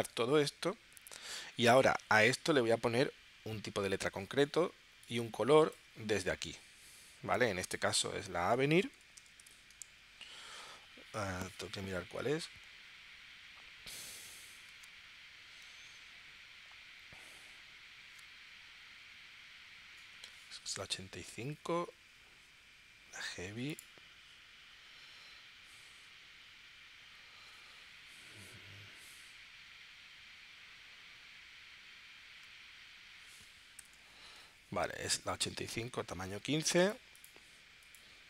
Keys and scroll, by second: 8.6-9.5 typing.